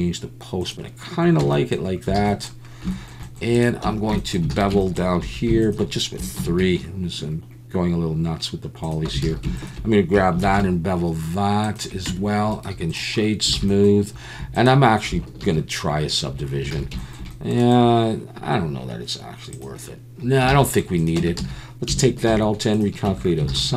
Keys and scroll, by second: 1.4 Tab, 2.2 alt+a, 3.8 Tab, 4.5 alt+a, 5.2 2, 5.8 Tab, 6.4 ctrl+b, 6.5 Tab, 6.5 alt+a, 9.2 alt+a, 10.4 ctrl+b, 12.1 Tab, 13.5 alt+a, 15.5 ctrl+1, 16.7 alt+a, 20.5 alt+a, 21.2 Tab, 21.4 a, 22.3 alt+n, 22.4 alt+a, 23.1 Tab, 23.5 alt+a, 23.6 alt+n.